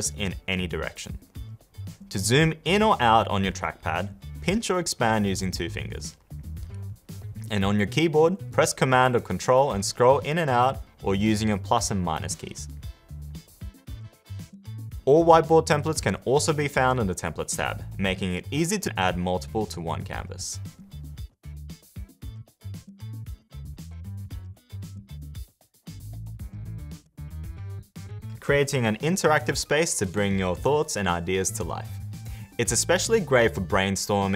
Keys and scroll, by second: 13.5 super+-, 21.8 space.